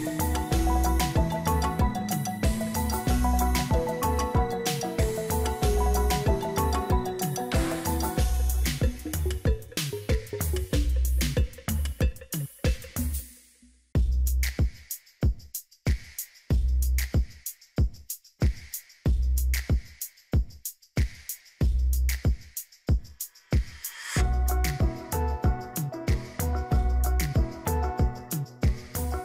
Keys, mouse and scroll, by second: 0.3 double click, 2.0 right click, 5.3 ctrl+j, 8.5 right click, 12.9 double click, 18.7 click, 18.9 ctrl+-, 24.9 ctrl+z, 28.6 ctrl+z.